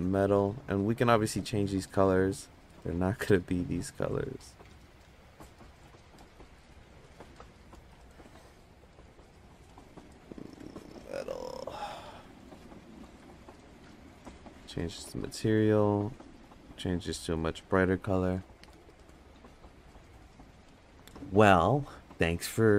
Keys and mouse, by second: 2.9 click, 7.5-13.5 drag, 10.8 BackSpace, 14.6 click.